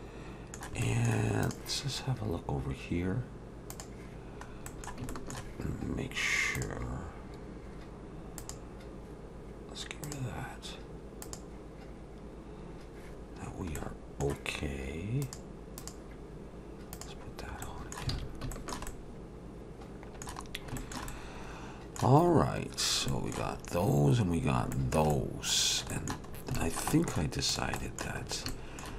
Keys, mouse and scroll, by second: 0.8 middle click, 1.4 click, 3.7 click, 4.7 middle click, 5.1 shift+middle click, 6.6 click, 8.4 click, 11.2 click, 13.8 middle click, 15.2 click, 15.8 click, 17.6 middle click, 18.1 alt+a, 18.5 shift+middle click, 18.9 middle click, 20.5 scroll down 1, 20.8 shift+middle click, 21.1 middle click, 22.3 scroll up 1, 23.1 shift+middle click, 23.1-23.8 scroll up 3, 24.3-24.7 scroll down 3, 24.7 shift+middle click, 25.1 middle click, 25.9 middle click, 26.3 scroll up 2, 26.5 middle click, 26.9 middle click, 27.5 click, 27.8 middle click, 28.2-28.8 scroll up 2, 28.5 shift+middle click, 28.8 shift+middle click.